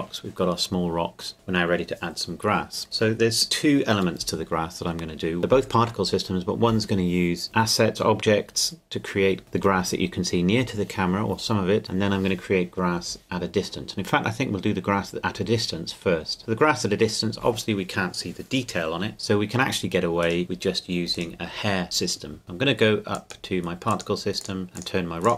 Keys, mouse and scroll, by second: 23.1 click.